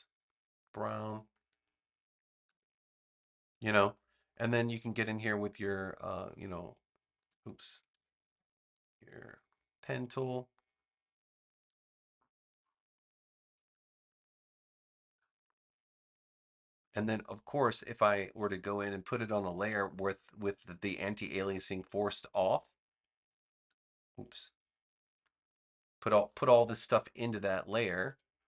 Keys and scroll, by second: 2.4 v, 7.8 super+z, 8.1 Escape.